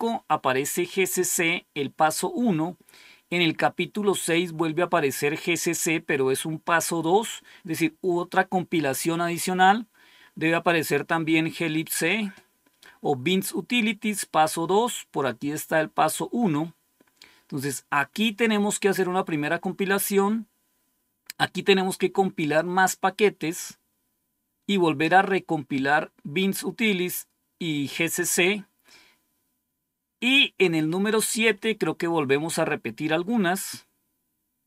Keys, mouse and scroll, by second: 2.7-3.3 scroll down 2, 28.6-31.1 scroll down 3, 33.6-34.2 scroll down 2, 34.2 scroll down 1.